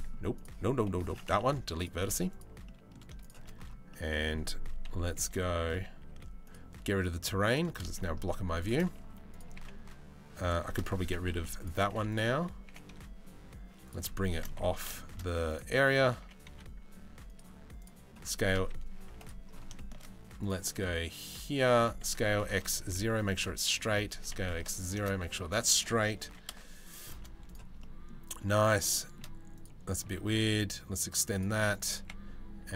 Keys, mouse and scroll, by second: 0.0 right click, 1.0 Delete, 1.9 right click, 2.3 middle click, 2.8 shift+right click, 4.5 KP_3, 4.9 KP_1, 5.4 a, 5.7 z, 7.1 click, 7.6 shift+middle click, 9.2 g, 11.0 Delete, 12.3 g, 13.8 shift+middle click, 14.3 a, 14.6 shift+middle click, 15.1 click, 15.8 g, 17.4 click, 17.8 s, 19.4 shift+middle click, 20.0 middle click, 21.4 s, 23.7 s, 25.8 g, 27.4 shift+middle click, 28.6 shift+middle click, 29.2 click, 29.7 g, 31.6 g.